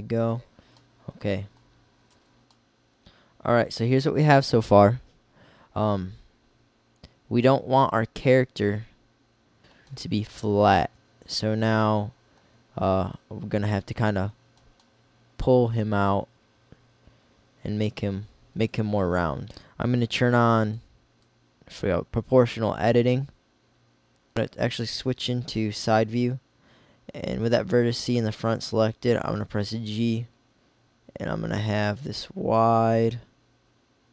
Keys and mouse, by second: 2.2 z, 10.0 middle click, 16.5 middle click, 18.1-19.5 middle drag, 19.5 click, 21.1-22.9 drag, 24.3 KP_3, 27.3 g.